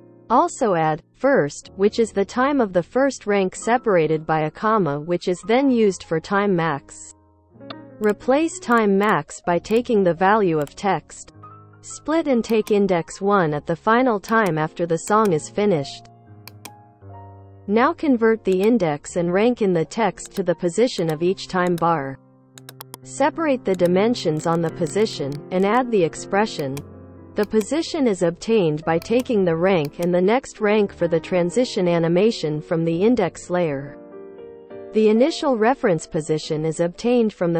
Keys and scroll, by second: 11.3 ctrl+v, 22.0 p, 24.3 p, 24.7 p, 25.2 p.